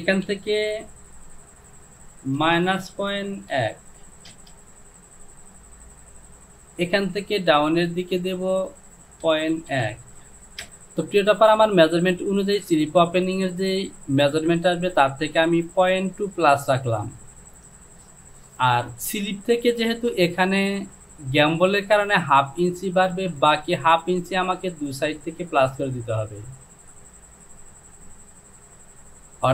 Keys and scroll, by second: 0.3 Down, 2.5 KP_Subtract, 3.0 KP_Decimal, 3.6 KP_1, 4.3 Return, 8.2 Down, 9.3 KP_Decimal, 9.8 KP_1.